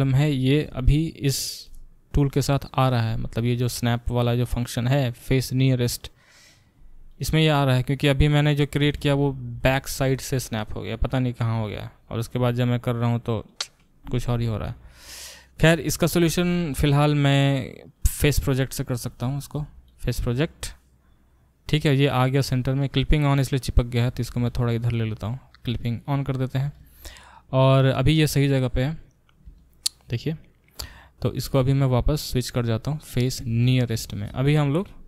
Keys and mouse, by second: 4.9-21.1 drag, 9.0 ctrl+z, 14.3 ctrl+z, 19.5 g, 21.1-23.3 middle drag, 23.3 click, 23.4-25.9 middle drag, 24.1 g, 25.9 click, 26.0-31.4 middle drag, 31.4-35.0 drag.